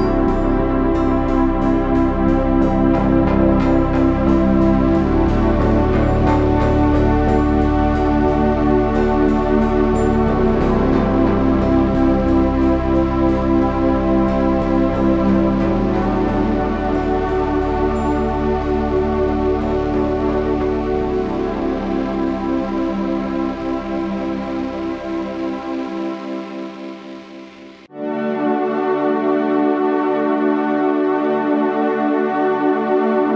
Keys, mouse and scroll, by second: 1.2 KP_1, 1.8 Tab, 2.5 ctrl+Tab, 3.6 z, 4.4 b, 26.3 f, 27.1 Tab, 29.1 KP_3, 30.1 KP_1, 30.8 Tab, 31.1 z, 32.1 z.